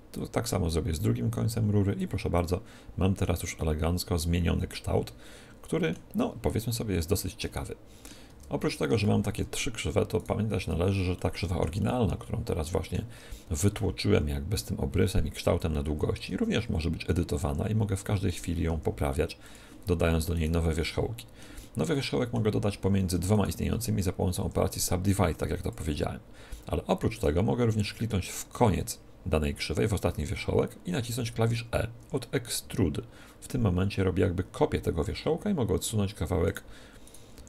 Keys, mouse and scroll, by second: 0.1-1.8 drag, 2.3-5.3 middle drag, 6.2-10.2 middle drag, 8.2 Tab, 9.2 Tab, 10.2-11.8 right drag, 10.2 middle click, 11.1-13.5 middle drag, 16.1 Tab, 17.0-18.2 right drag, 17.4 r, 18.2 click, 18.6 g, 18.8-20.3 drag, 20.5 click, 20.5-22.0 right drag, 22.0-23.2 middle drag, 23.2-25.2 right drag, 24.3 w, 27.0-28.8 right drag, 31.9 e, 36.4-37.4 drag, 37.0-37.4 right drag, 37.3 r.